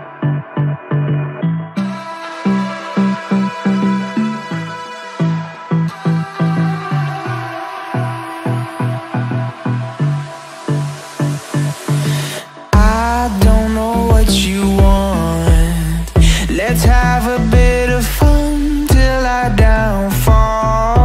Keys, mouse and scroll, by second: 1.4 s, 3.7 ctrl+z, 10.1-15.3 drag, 15.3 BackSpace, 18.3-20.0 drag, 20.8 click.